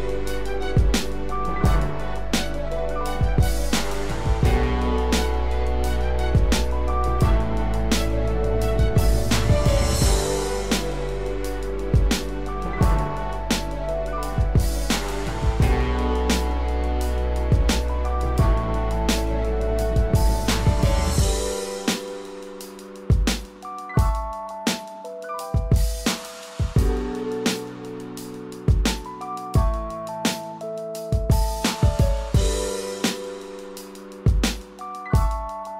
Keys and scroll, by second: 10.6 ctrl+=.